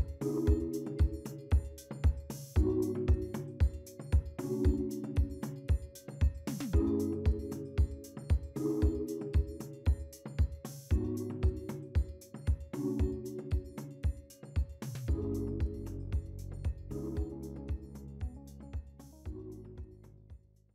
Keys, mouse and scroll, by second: 19.9 right click.